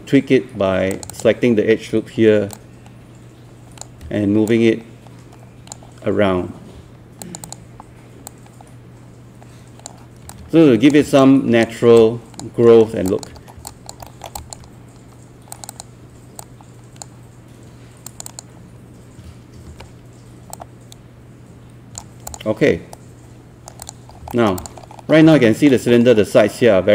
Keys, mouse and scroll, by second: 0.9-3.9 drag, 4.1 w, 4.5-11.0 drag, 11.2 alt+click, 12.0 alt+click, 12.7 alt+middle click, 13.4 scroll up 1, 13.7 alt+click, 14.1 alt+middle click, 14.4 alt+click, 15.5-17.9 drag, 19.3-19.7 typing, 20.5-22.9 drag, 22.9 right click, 23.8 click, 24.3 alt+middle click, 24.6 click, 24.8 scroll up 1, 25.3 alt+middle click, 25.9 scroll up 1, 26.3 scroll down 1.